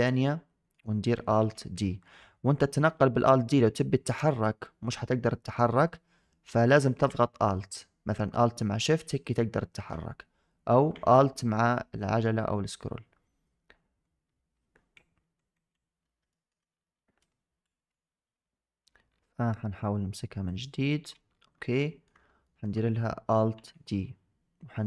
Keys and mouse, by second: 0.0-0.6 shift+middle drag, 1.2 alt+d, 16.3 shift+click, 17.6 Delete, 20.4 click, 21.7 shift+drag, 22.3 shift+click, 23.4 alt+d.